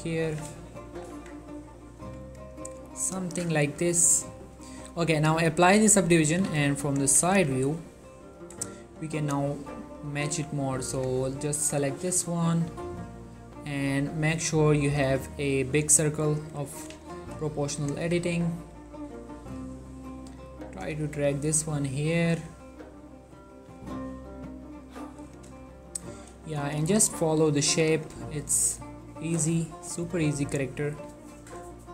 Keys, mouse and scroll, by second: 0.4 z, 0.7 shift+middle click, 1.0 z, 1.3 Tab, 1.8-5.6 ctrl+middle drag, 5.6 click, 6.4 3, 6.8 scroll up 1, 7.0 click, 7.2 Tab, 7.4 z, 7.9 ctrl+middle click, 8.7 shift+middle click, 10.2 click, 11.3 click, 12.1 g, 12.3-12.9 scroll down 2, 12.9-13.4 scroll down 1, 13.4-14.6 scroll up 2, 14.6-15.1 scroll down 2, 15.1-16.3 scroll up 2, 16.3 scroll up 1, 16.5 click, 17.1 shift+middle click, 17.9 click, 18.1 g, 18.4-18.9 scroll up 2, 18.9 right click, 19.2 click, 19.9 g, 20.2 right click, 20.6 click, 21.0 g, 21.2-21.9 scroll up 2, 21.9 scroll up 1, 22.1-23.8 drag, 23.8 g, 24.0-25.0 scroll down 2, 25.0 click, 25.5 shift+middle click, 26.6 click, 26.9 g, 27.1-27.5 scroll up 1, 28.0 click, 29.6 g, 30.6 click, 31.4 shift+middle click.